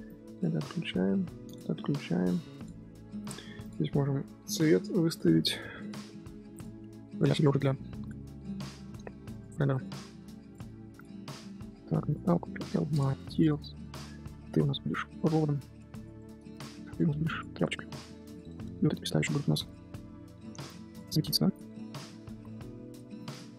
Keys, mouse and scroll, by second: 0.0-1.5 drag, 2.5 click, 3.2 click, 3.6 click, 5.0 click, 5.7-7.2 drag, 7.6 click, 8.2 scroll down 1, 8.4 scroll up 1, 8.9 scroll down 1, 9.0 a, 9.7 ctrl+drag, 10.5 shift+click, 11.0-12.3 drag, 12.7 ctrl+l, 13.5 scroll up 2, 14.4 click, 14.9-16.0 drag, 16.2-16.5 shift+middle drag, 16.5 click, 16.9 click, 17.6 click, 17.7-18.1 middle drag, 18.1 scroll down 3, 18.3 click, 18.4 shift+middle click, 18.5 scroll up 1, 18.8 middle click, 19.0 click, 19.6 alt+click, 20.2 Tab, 20.7-21.7 drag, 21.7 Tab, 21.9 click, 22.4 alt+click, 22.9 click.